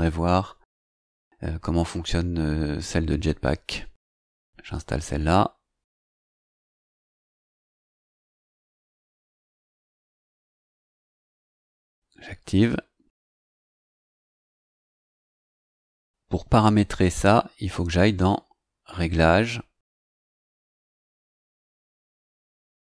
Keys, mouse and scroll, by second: 4.2 click, 11.6 click, 16.2 click.